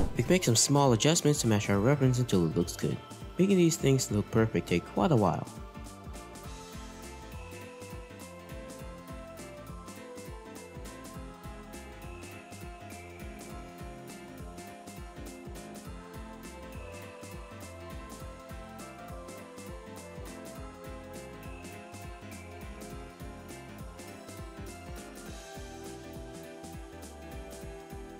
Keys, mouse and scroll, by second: 0.1 r, 1.7 r, 8.4 r, 15.9 scroll down 4, 16.8 scroll down 2, 17.1-17.7 scroll up 2, 17.7-18.0 scroll up 3, 18.7 scroll up 1, 20.1 scroll down 2, 20.2 middle click, 20.6-21.2 scroll up 1, 21.2 r, 22.2 r.